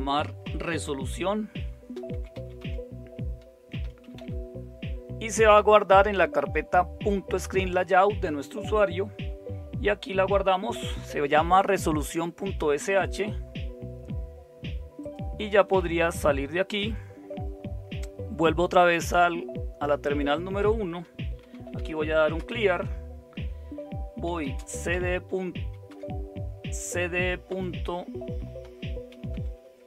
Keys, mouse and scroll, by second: 0.5-4.6 typing, 21.1-22.3 typing, 24.0-26.4 typing, 27.4-29.8 typing.